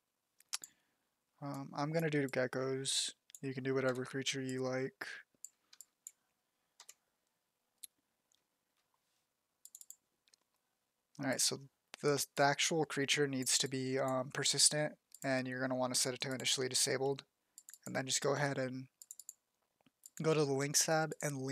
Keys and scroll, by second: 2.4 z, 3.7 f, 5.5 z, 6.6 f.